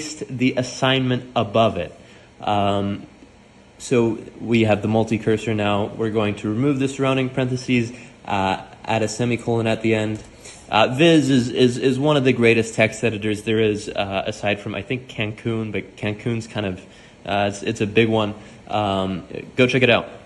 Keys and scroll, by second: 1.0 Escape, 1.8 p, 4.1-7.7 typing, 8.9 Escape, 9.0 Escape, 13.4 typing.